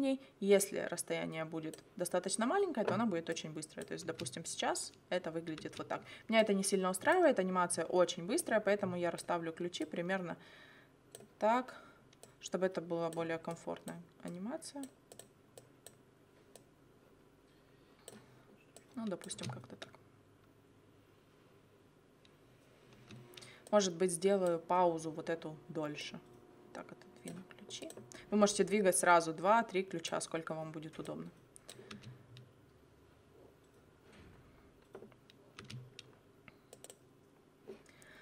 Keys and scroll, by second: 4.0 space, 5.6 space, 19.4 space, 22.9 space, 31.9 space, 35.6 space.